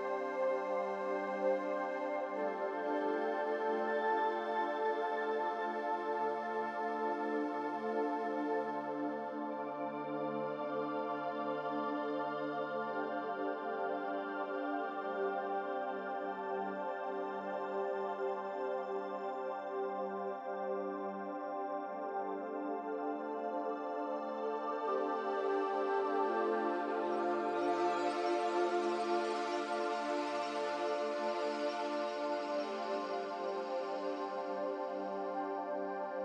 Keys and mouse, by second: 0.4-1.1 drag, 1.3 g, 2.8 Tab, 5.2 click, 6.0 click, 6.7 click, 7.8 click, 8.9 shift+click, 9.6 shift+click, 14.4 click, 16.8 u, 21.2 a, 21.6 s, 23.0 g, 27.0-27.6 middle drag, 28.1 g, 29.5 s, 31.2 g, 32.5 s, 34.0 g.